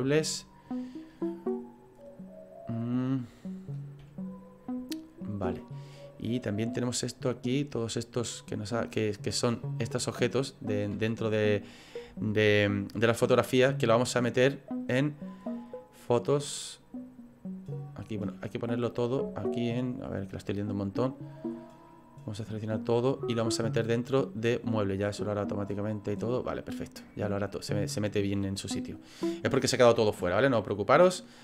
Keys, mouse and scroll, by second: 4.6 click, 6.2-7.0 scroll down 2, 7.0 click, 8.2-9.3 scroll down 4, 9.6 click, 16.4 click, 19.1 click, 20.8-22.2 scroll down 10, 22.2 scroll down 3, 22.4 click, 23.7-24.6 scroll up 1, 24.6-25.0 scroll up 2, 25.0 click, 30.5 click.